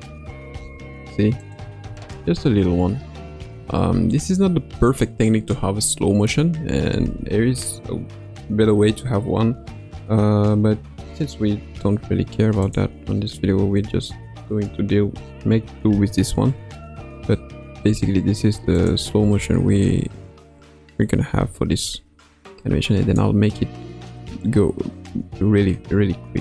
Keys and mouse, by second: 0.5 space, 1.3 click, 1.9 space, 3.9 space, 4.9-6.7 drag, 12.6 click, 13.3 c, 15.9 space, 17.9 space, 19.1 space, 21.3 space, 22.4 click.